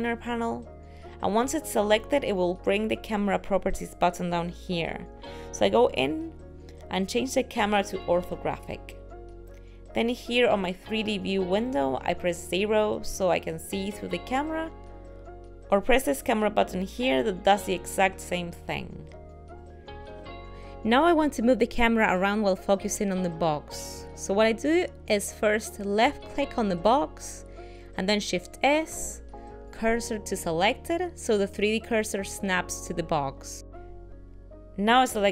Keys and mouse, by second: 5.2 click, 8.8 click, 13.3 KP_0, 16.0 click, 16.8 click, 18.6 ctrl+middle click, 20.3 shift+middle click, 27.1 click, 28.6 shift+s.